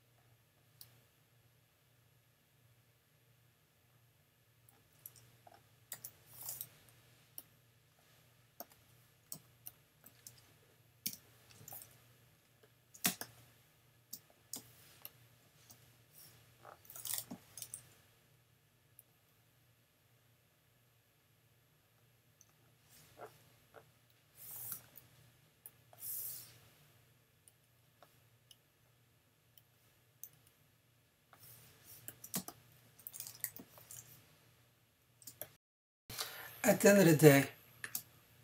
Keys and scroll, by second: 5.9 super+j, 9.3 super+v, 9.9 v, 11.1 shift+super+[, 13.1 super+space, 14.5 space, 17.3 n, 24.7 x, 32.4 super+space, 33.6 n, 35.3 space.